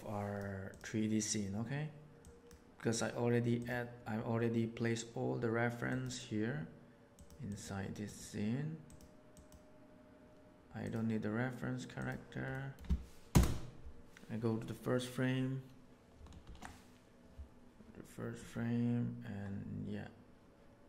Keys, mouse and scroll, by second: 2.1 middle click, 3.5 middle click, 7.6 click, 9.4 click, 11.9 middle click, 12.5 click, 12.5 middle click, 12.5 right click, 13.2 KP_0, 16.4 shift+Left.